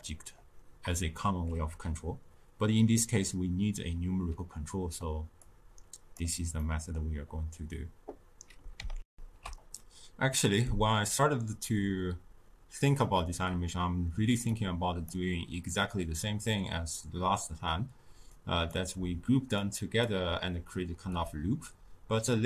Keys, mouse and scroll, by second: 8.2 middle click, 9.0 ctrl+alt+shift+q, 14.4 click, 18.2-21.2 drag.